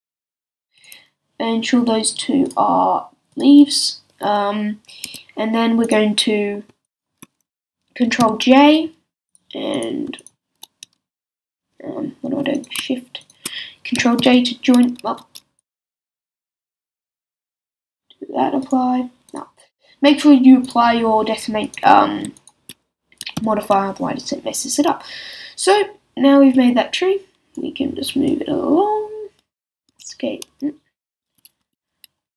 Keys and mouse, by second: 5.0 a, 8.2 ctrl+j, 14.2 ctrl+j, 15.1 z, 19.4-21.6 drag, 23.3 ctrl+j, 26.9-32.3 drag, 29.9 z, 30.1-32.3 middle drag, 30.1-32.3 right drag, 31.2 s.